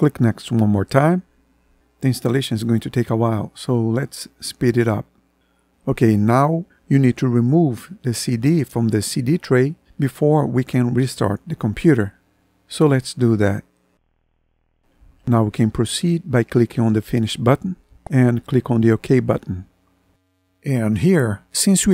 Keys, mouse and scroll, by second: 12.0 middle click.